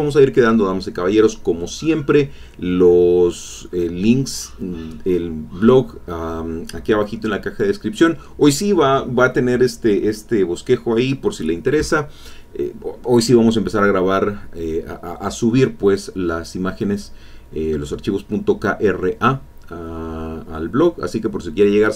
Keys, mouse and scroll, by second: 5.1 click, 6.0 click, 6.4 click, 7.1 click, 9.0 ctrl+middle click, 9.0-9.4 ctrl+scroll up 1.